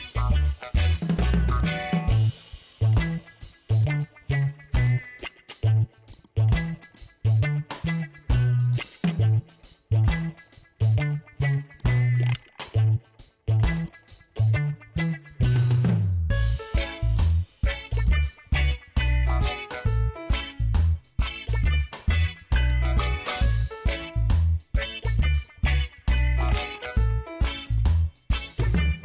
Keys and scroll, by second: 4.5 space, 5.7 ctrl+z, 6.7 space, 12.5 ctrl+z.